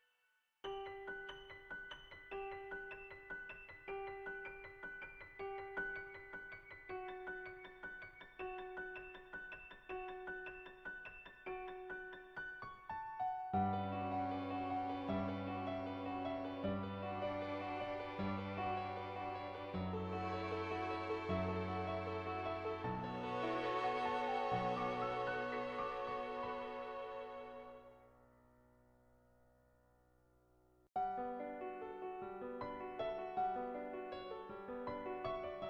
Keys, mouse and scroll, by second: 0.1 ], 0.3 ], 0.5 click, 3.0 [, 3.5 ], 3.8 click, 5.0 /, 7.0 click, 7.7 click, 9.0 ctrl+z, 9.7 [, 9.8 [, 9.9 click, 10.5 ], 10.7 click, 13.6 click, 14.5-19.5 drag, 19.5 ], 19.8 click, 22.5 click, 23.2 click, 23.8 click, 25.2 [, 25.4 click, 28.0 [, 28.3 click, 29.4 ctrl+z, 30.6 click.